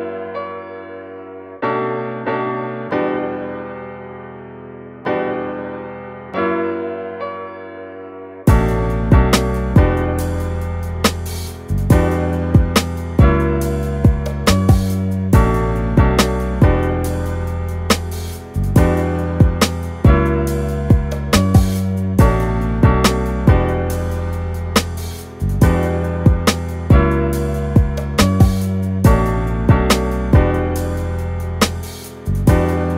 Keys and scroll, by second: 0.9 super+z.